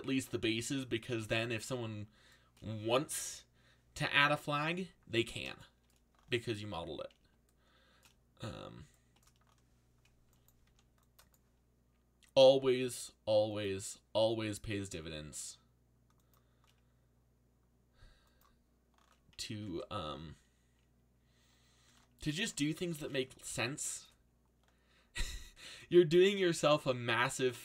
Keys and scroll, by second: 10.6 c, 19.6 alt+a.